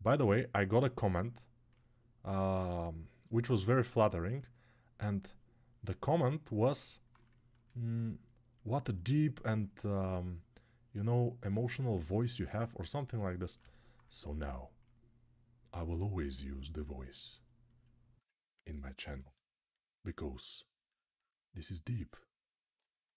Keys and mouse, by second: 5.8-23.1 drag.